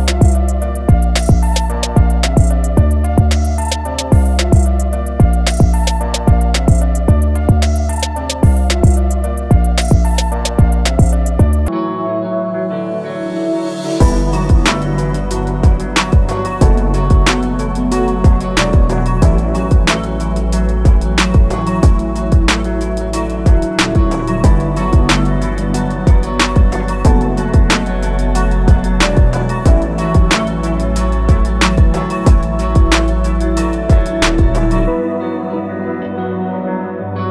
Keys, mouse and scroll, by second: 2.7 click, 3.3 alt+scroll up 1, 5.1 shift+click, 6.6 click, 8.3 Escape, 9.6 ctrl+a, 10.7 shift+m, 11.5 click, 12.5 alt+click, 12.9 alt+scroll down 1, 13.9 alt+scroll down 1, 15.2 click, 17.1 alt+scroll up 1, 18.0-19.2 alt+scroll down 2, 19.2 click, 20.4 alt+shift+click, 21.7 scroll up 1, 23.0 click, 27.8-28.1 scroll up 1, 29.1 click, 33.6 shift+click, 36.1 click, 36.5 alt+scroll down 1, 37.1-37.3 scroll up 1.